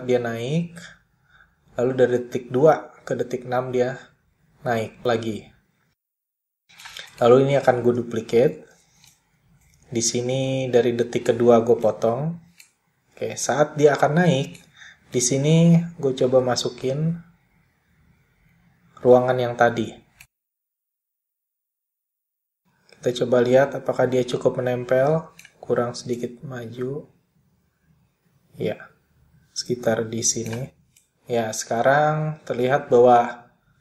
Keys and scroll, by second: 7.8 super+d.